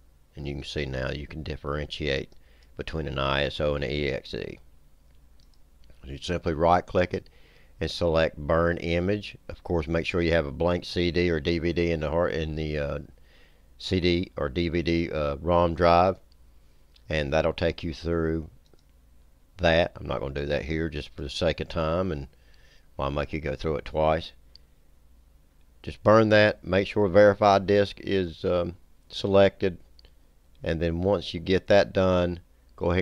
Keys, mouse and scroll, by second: 2.4 click, 5.5 click, 6.3 right click, 18.7 click, 21.1 click, 30.9 click.